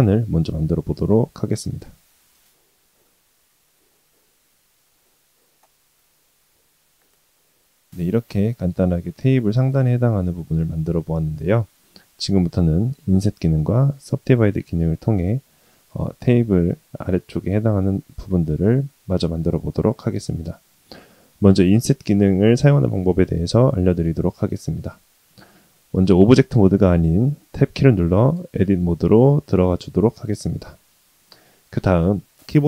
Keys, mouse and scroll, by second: 0.4 s, 3.6-3.9 middle drag, 4.1 s, 5.1 middle drag, 5.9 s, 6.9-7.2 middle drag, 7.3 g, 7.7 shift+middle click, 7.9 middle click, 28.3 Tab, 31.2 shift+middle click, 31.5-32.6 middle drag.